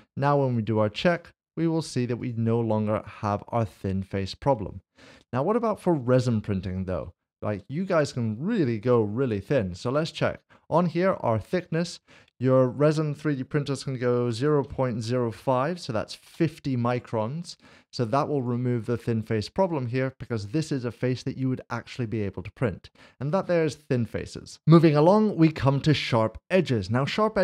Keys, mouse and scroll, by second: 0.7 click, 5.9 ctrl+z, 8.8 Tab, 9.4 click, 11.5 click, 14.5-15.3 typing, 16.3 Return, 17.8 click, 23.5 click, 23.7 middle click, 24.3 shift+middle click, 24.6 click.